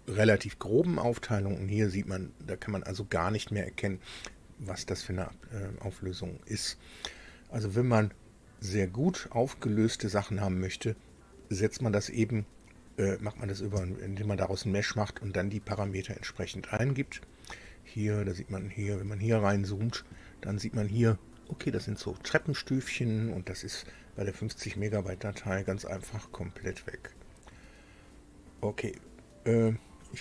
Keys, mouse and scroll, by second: 0.0-0.6 scroll down 2, 1.2-2.0 scroll up 4, 2.3 scroll down 2, 3.1 scroll down 2, 3.7-5.0 drag, 5.0-7.1 middle drag, 7.7-8.1 scroll up 2, 8.5-11.5 right drag, 16.7-17.2 scroll up 2, 17.3-17.7 scroll up 2, 17.9-20.5 scroll up 14, 22.5-22.9 scroll down 2, 23.9-24.5 scroll down 4, 26.1-26.6 scroll down 2, 26.7 scroll down 2, 29.4 click.